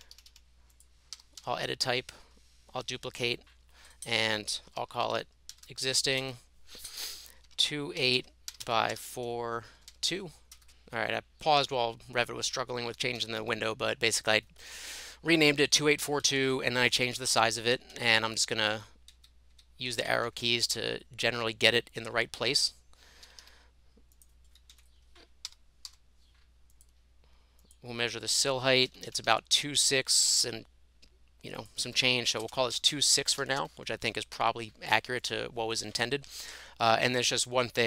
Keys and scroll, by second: 0.0-1.9 typing, 5.2-6.2 typing, 7.2-10.4 typing, 10.6 Return, 13.2 Escape, 13.5 Escape, 16.1 shift+Up, 16.3 shift+Up, 16.5 shift+Up, 17.0 Down, 17.2 Down, 17.5 Down, 17.8 Right, 18.0 Right, 18.2 Right, 18.8 Left, 19.2 Right, 19.5 Right, 20.1 Down, 20.3 Down, 20.8 Left, 21.4 Up, 23.3 Escape, 23.5 Escape, 24.7 Up, 25.3-26.4 typing, 28.9 Escape, 29.2 Escape, 29.4 Escape, 32.3 2, 32.4 space, 32.7 6, 32.9 Return, 33.6 Escape, 36.0 Delete.